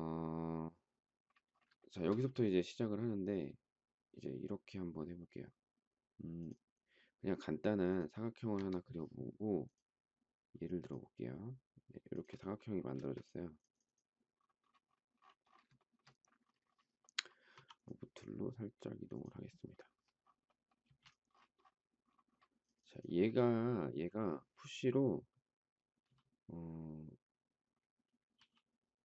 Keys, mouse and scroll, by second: 1.7 shift+middle click, 8.5 Escape, 12.9 space, 15.7 shift+middle click, 17.5 m, 20.8 space, 28.3 p.